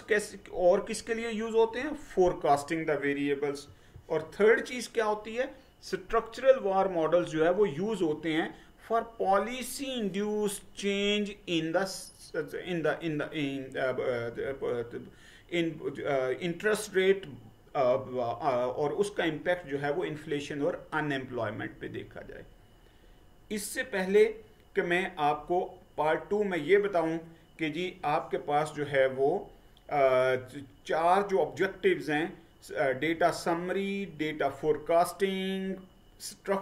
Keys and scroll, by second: 3.8 Right.